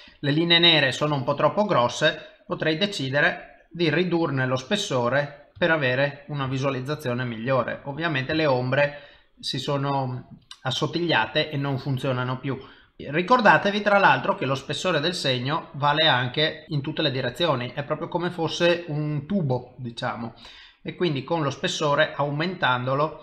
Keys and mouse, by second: 0.1 click, 2.1 click, 4.8 middle click, 5.7 ctrl+middle click, 6.5 shift+middle click, 7.0 middle click, 8.4 shift+middle click, 14.7 middle click, 16.6 middle click, 17.3 middle click, 19.6 click, 22.5 middle click.